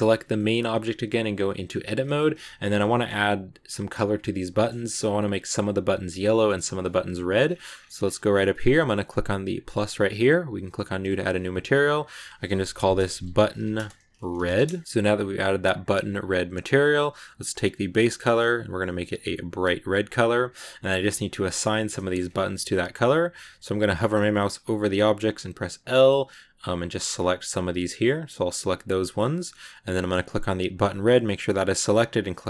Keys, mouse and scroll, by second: 0.2 shift+middle click, 0.8 Tab, 1.5 scroll up 1, 1.6 a, 1.7 a, 2.0 shift+middle click, 2.2 scroll up 2, 2.4-4.8 middle drag, 4.8 scroll up 1, 7.3-8.0 scroll up 10, 9.4-11.8 drag, 11.9-13.1 drag, 13.1 t, 17.6 click, 24.7 l, 30.6 click, 32.2-32.4 drag.